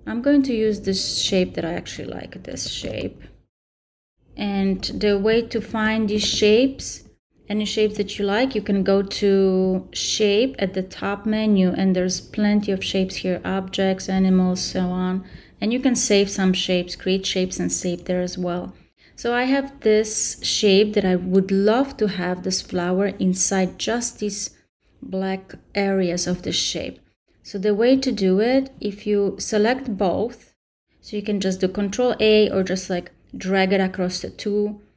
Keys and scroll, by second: 2.8 super+c, 6.1 super+v.